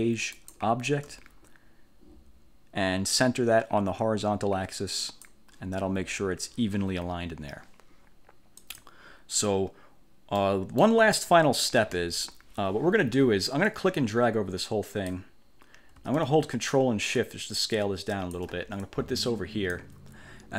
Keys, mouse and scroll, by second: 0.5 shift+click, 5.2 click, 8.7 click, 10.5 middle click, 12.0 1, 13.8-15.4 drag, 17.3-18.6 ctrl+shift+drag, 19.0 ctrl+shift+click.